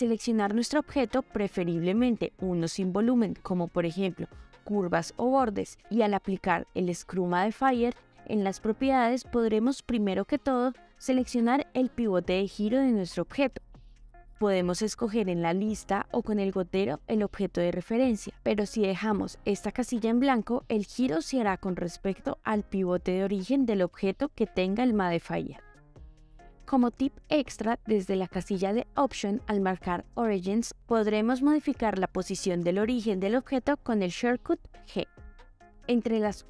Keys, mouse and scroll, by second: 4.3 s, 6.3-8.7 drag, 12.3 click, 15.1 click, 15.8 g, 20.7 click, 23.7-24.0 shift+middle drag, 29.6-31.4 drag, 32.4 g.